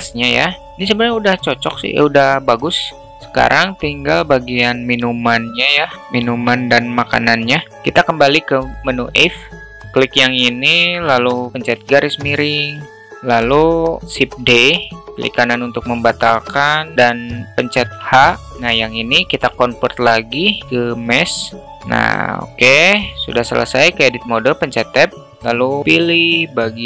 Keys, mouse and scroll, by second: 0.5 alt+middle click, 1.1 middle click, 1.8 alt+click, 7.9 click, 11.5 /, 12.4 alt+middle click, 14.0 shift+d, 17.8 h, 18.4 alt+middle click, 19.6-22.3 right drag, 23.7 Tab, 24.9 alt+middle click, 25.5 alt+middle click.